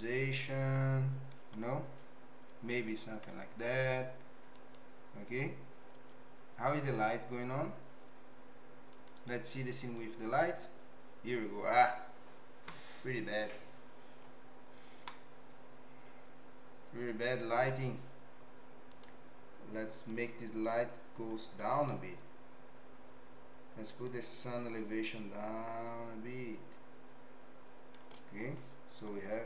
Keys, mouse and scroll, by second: 2.7 z, 8.9-10.4 drag, 15.0-17.8 middle drag, 18.9 click, 20.1 click, 24.0-28.0 shift+drag.